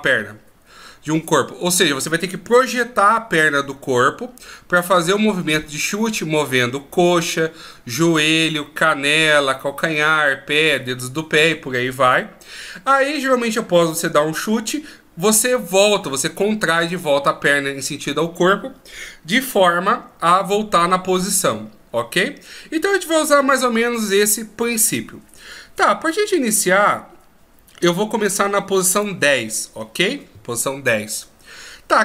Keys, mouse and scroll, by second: 26.9 click.